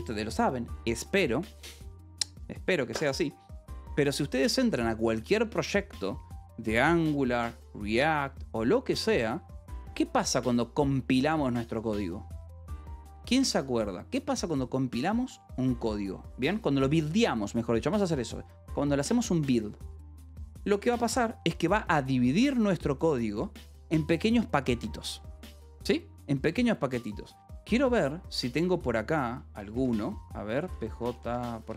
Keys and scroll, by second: 26.6-27.4 typing, 29.7-31.7 typing, 29.8 Return.